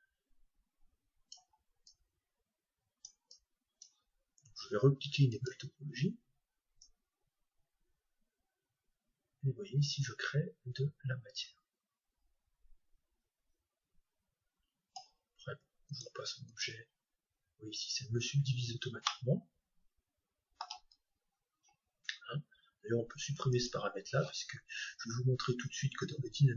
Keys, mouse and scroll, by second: 2.0-5.1 drag, 5.5-8.7 drag, 15.9-17.8 drag, 19.1-21.1 middle drag, 23.5-25.5 drag.